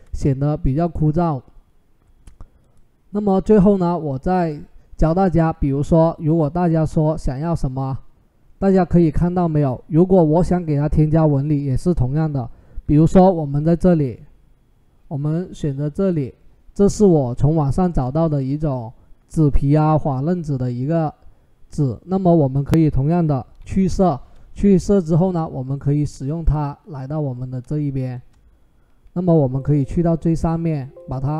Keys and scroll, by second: 23.4 ctrl+shift+u.